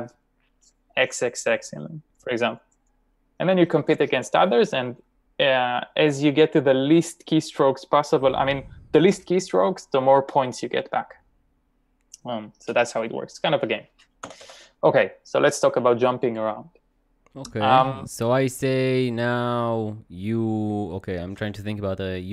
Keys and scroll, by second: 14.3 typing.